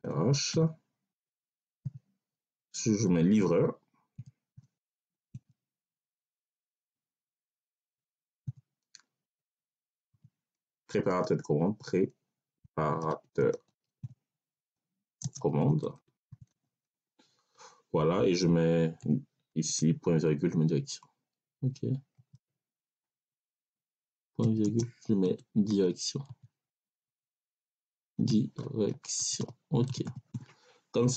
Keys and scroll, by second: 0.4 h, 1.7 ,, 3.2-5.2 typing, 6.6 r, 8.3 ,, 10.0 p, 11.1 r, 11.5 e, 12.5-16.8 typing, 18.9 ,, 19.6 BackSpace, 22.0 ., 23.2 BackSpace, 24.3 ., 24.5 space, 25.6 d, 26.1 i, 26.6 BackSpace, 27.9-30.2 typing.